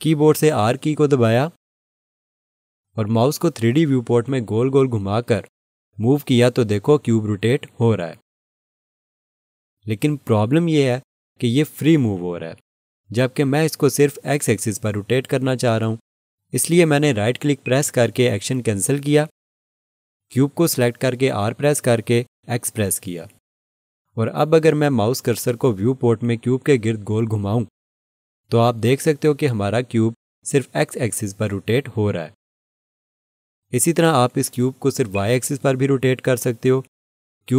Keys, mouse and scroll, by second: 17.6 right click, 21.9 r, 23.2 x, 35.1 right click, 36.8 y.